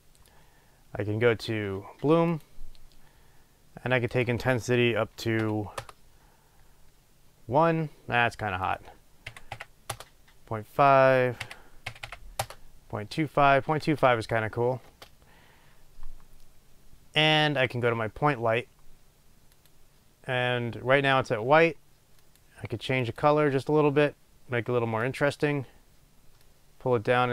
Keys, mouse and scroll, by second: 6.0 Return, 10.0 Return, 13.8 space, 15.0 space.